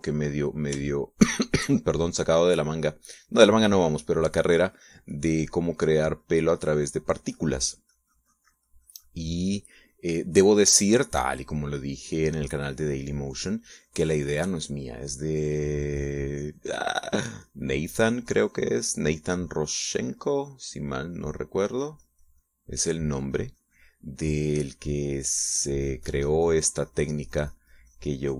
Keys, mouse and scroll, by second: 0.4 middle click, 1.1 middle click, 1.8 shift+middle click, 2.4 shift+middle click, 3.2 click, 4.0 middle click, 4.6-16.8 drag, 16.9-21.1 drag, 21.2 middle click, 21.9-25.0 drag, 25.5 middle click, 26.4-28.3 drag.